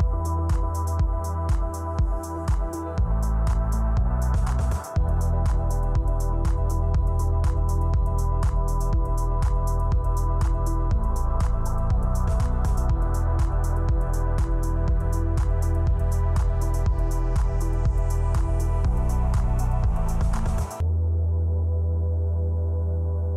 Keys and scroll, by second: 1.7 Up, 2.0 shift+super+Right, 2.2 Left, 2.3 Left, 3.1 super+d, 3.9 super+Left, 5.3 super+d, 6.1 super+Right, 7.4 super+d, 8.1 shift+super+Left, 8.4 Right, 9.6 super+Left, 10.3 shift+Right, 10.4 shift+Left, 10.9 super+d, 11.6 shift+super+Right, 12.2 super+d, 12.8 Left, 13.3 super+d, 13.9 super+Right, 14.7 super+d, 15.5 Left, 16.3 super+d, 17.0 super+Left, 17.5 shift+Right, 18.0 super+d, 18.5 super+Right, 19.0 Left, 19.1 Right, 19.5 super+d, 20.2 super+Right, 20.8 super+z, 20.9 super+d, 21.7 shift+super+Right.